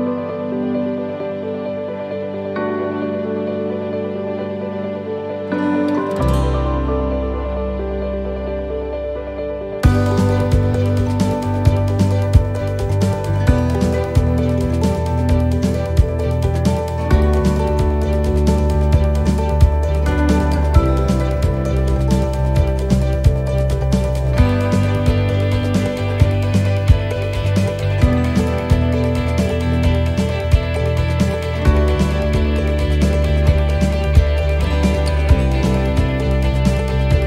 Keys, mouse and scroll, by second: 0.8 right click, 5.4 l, 6.2 l, 6.4 l, 7.4 l, 9.0 l, 10.7 middle click, 10.7 l, 10.7 middle click, 11.2 middle click, 12.5 middle click, 14.4 click, 16.0 middle click, 17.0 shift+middle click, 17.4 scroll up 2, 17.7 middle click, 20.0 right click, 20.1 right click, 21.5 l, 22.6 click, 23.9 middle click, 24.4 scroll down 1, 25.1 scroll down 1, 25.1 middle click, 25.8 right click, 27.9 l, 28.1 l, 28.8 click, 30.5 click, 32.8 s, 36.4 middle click, 37.0 shift+middle click.